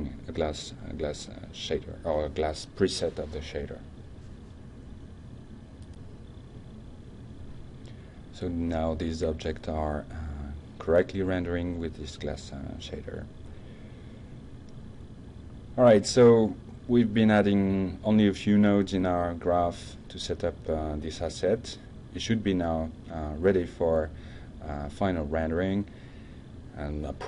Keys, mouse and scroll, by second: 9.6 click, 12.2 click, 16.4 click, 18.1 alt+2, 19.9 shift+2, 23.5 middle drag, 24.0 click, 24.7 middle drag, 25.2 middle click, 25.5 drag, 26.1 middle click, 26.6 click.